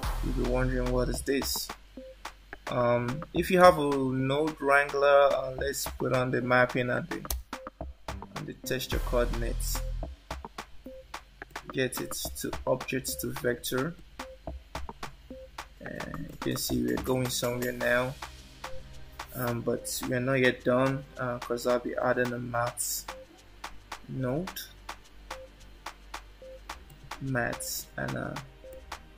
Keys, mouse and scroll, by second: 7.2 ctrl+t, 11.5 click, 14.0 click, 16.3 click, 21.9 shift+a, 28.7 click.